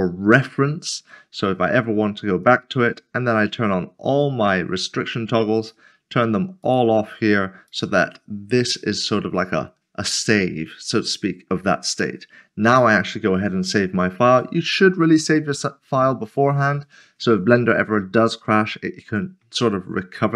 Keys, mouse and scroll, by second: 1.4 click, 5.1 click, 11.9 click, 17.7 click, 17.9 middle click, 20.2 scroll up 1.